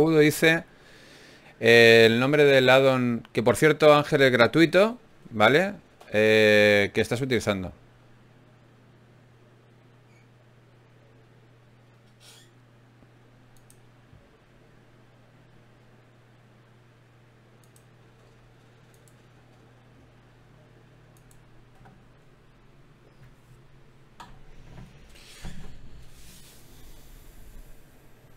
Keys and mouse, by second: 0.5-1.7 right drag, 1.7 f, 2.7 f, 2.9-4.0 right drag, 4.6 ctrl+Tab, 5.4 click, 6.2-8.6 drag, 8.6 t.